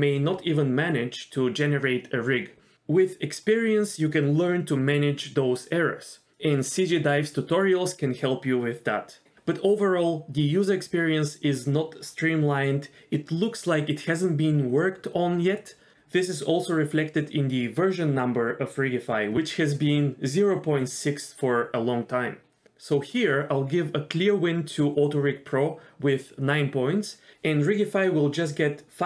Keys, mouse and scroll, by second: 2.9 middle click, 6.1 middle click, 6.3 ctrl+z, 7.4 shift+middle click, 10.4 middle click, 11.0 middle click, 11.3 click, 12.5 click, 13.1 x, 17.6-20.2 drag, 20.8 middle click, 21.2 middle click, 25.0 middle click.